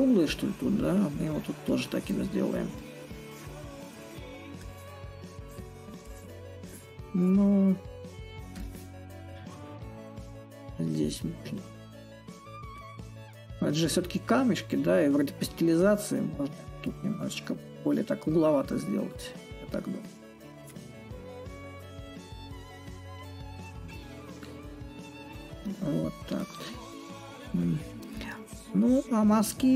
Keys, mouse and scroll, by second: 2.4-7.4 drag, 8.2-13.2 drag, 13.6-18.6 drag, 18.7-23.7 drag, 24.8 click.